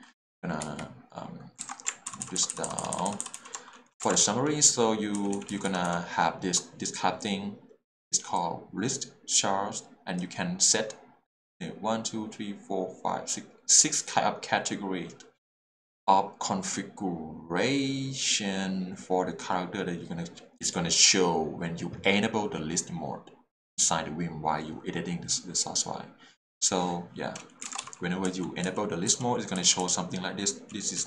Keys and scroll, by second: 0.6 Escape, 1.6 alt+a, 2.1 ctrl+r, 2.4 ctrl+r, 2.5 ctrl+r, 4.0 ctrl+alt+super+a, 4.3 k, 5.7 j, 27.7 alt+a, 28.0 h, 28.2 k, 29.1 j, 29.6 k.